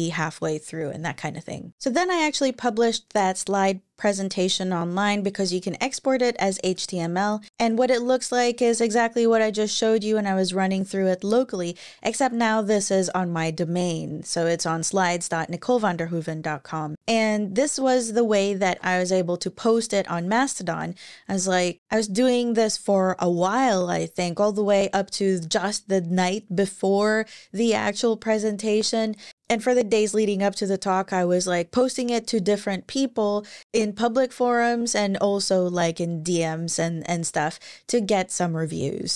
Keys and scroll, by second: 10.5 Right, 18.4 super+w.